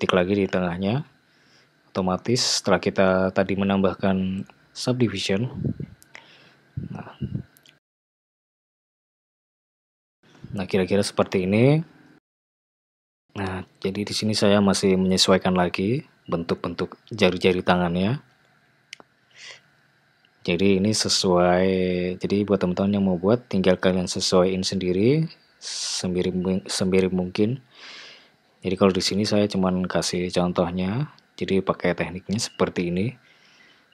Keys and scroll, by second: 6.8 `, 9.7 Tab, 17.9 g, 21.0 g, 23.1 g, 27.6 g, 31.5 g.